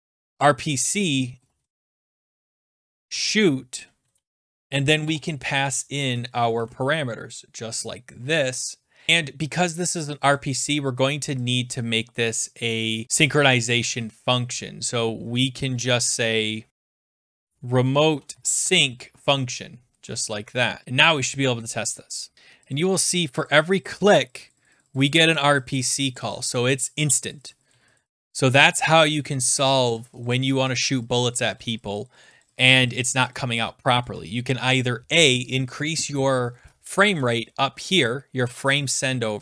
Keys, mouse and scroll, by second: 0.0-3.2 typing, 3.2 Right, 4.0 Right, 4.5 (, 4.5 ", 5.0 ,, 5.6 Delete, 5.9 Right, 6.2 Left, 6.6-8.1 Right, 8.3 Right, 8.4 Right, 9.1 click, 9.1-9.4 scroll, 10.3 click, 11.5 click, 12.6 click, 16.5-18.9 typing, 16.7 scroll, 16.7 click, 20.0 ctrl+s, 20.8 click, 21.4 typing, 22.3 click, 22.7 click, 23.0 click, 23.1 click, 23.3 click, 23.4 click, 23.6 click, 23.7 click, 24.2-27.3 drag, 27.7 Right, 28.0 click, 28.1 click, 28.2-28.5 Right, 28.3 Right, 28.3 click, 28.5 click, 28.5 Right, 28.6 Left, 28.6 click, 28.8 click, 29.1 Left, 29.1 click, 29.2 Left, 29.2 click, 29.2 Right, 29.3 click, 29.5 click, 29.7 click, 29.7 Right, 29.8 click, 30.0 click, 30.2 click, 30.4 click, 30.4 Left, 30.5 Left, 30.5 Left, 30.6 Right, 30.6 click, 30.7 click, 30.9 click, 31.1 Left, 31.1 click, 31.3 click, 31.5 click, 31.5 Right, 31.7 click, 31.9 click, 32.0 Right, 32.1 click, 32.2 Right, 32.2 Right, 32.2 click, 32.4 Right, 32.4 click, 32.5 Left, 32.6 click, 32.8 click, 33.0 click, 33.0 Left, 33.0 Right, 33.2 Left, 33.2 click, 33.3 click, 37.3 click, 37.4 scroll down 3, 37.6-38.0 scroll, 38.3 scroll down 9.